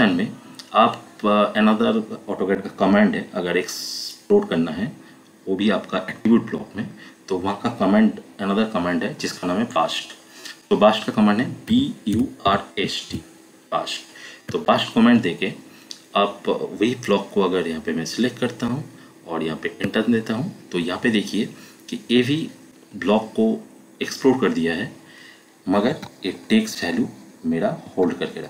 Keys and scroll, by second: 11.4-13.5 typing, 14.4 Return, 19.8 Return, 25.9 Escape, 27.9 Escape.